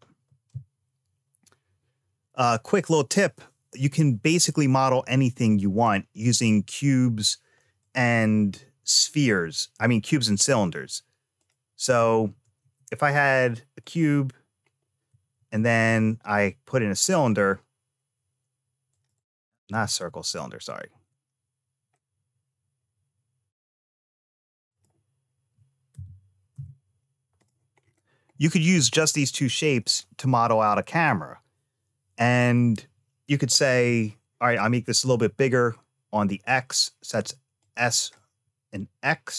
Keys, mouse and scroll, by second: 7.6 click, 10.7 x, 12.4 shift+a, 15.2 shift+a, 19.0 click, 19.9 ctrl+z, 20.7 shift+a, 25.8 g, 27.6-28.2 scroll down 2, 28.2 middle click, 29.7 click, 34.6 s, 37.4 click.